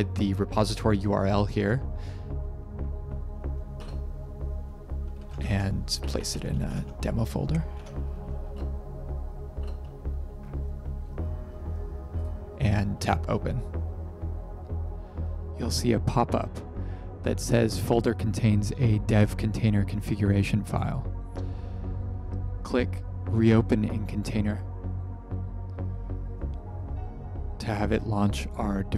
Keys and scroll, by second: 4.9-7.2 typing, 7.7 Tab, 8.4 Return, 8.4 typing, 9.5 Return.